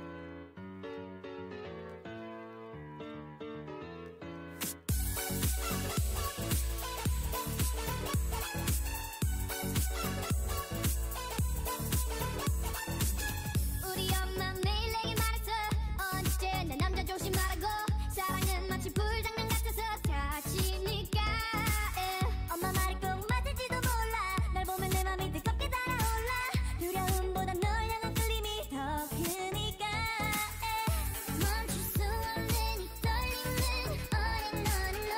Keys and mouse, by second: 0.8 Tab, 2.1 Tab, 2.5 a, 2.6 c, 3.0 click, 3.2 w, 3.9 Tab, 4.5 Tab, 4.9 a, 5.1 c, 6.1 w, 6.4 Tab, 15.0 Tab, 15.9 a, 16.1 c, 18.2 click, 18.5 w, 19.3 w, 20.1 Tab, 20.7 Tab, 21.2 a, 21.4 c, 22.7 click, 22.9 w, 23.3 Tab, 23.9 Tab, 24.1 w, 24.5 Tab, 25.6 Tab, 26.0 a, 26.2 c, 28.2 w, 29.0 w, 29.6 a, 30.7 c, 32.5 w, 33.3 w, 34.0 Tab.